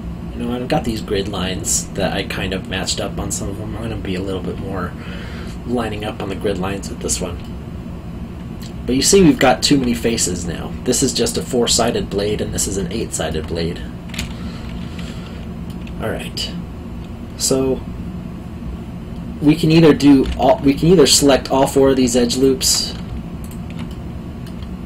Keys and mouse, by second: 0.8 click, 7.4 middle click, 9.3 alt+middle click, 13.0 alt+middle click, 16.2 middle click, 20.2 2, 21.0 alt+click, 23.4 alt+shift+click, 23.9 middle click.